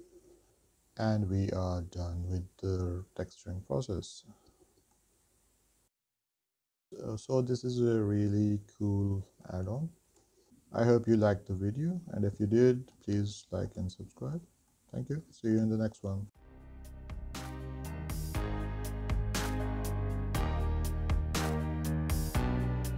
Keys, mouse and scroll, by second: 0.5 shift+middle click, 4.3 middle click, 6.3-6.6 scroll down 1, 9.3 middle click, 10.1 shift+middle click, 12.6 middle click, 13.7 shift+middle click, 14.3 middle click, 15.1 shift+middle click, 19.4 middle click, 20.7 shift+middle click.